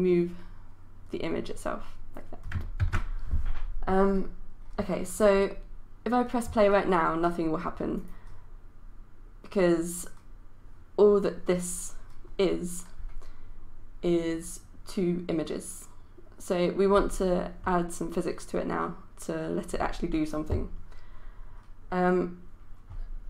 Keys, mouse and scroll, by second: 2.8 ctrl+z, 7.9-23.2 drag.